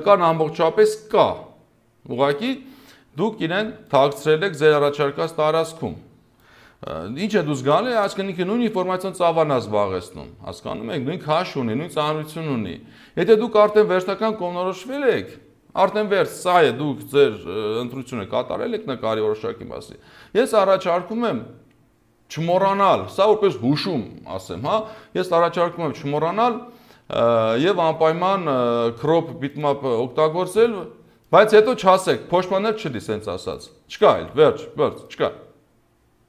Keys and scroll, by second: 7.1 ctrl+z, 7.8 space.